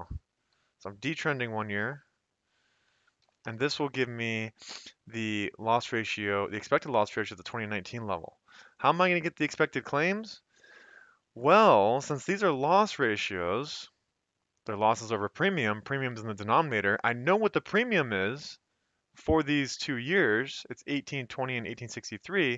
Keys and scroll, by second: 0.6-1.3 typing, 3.0-3.7 typing.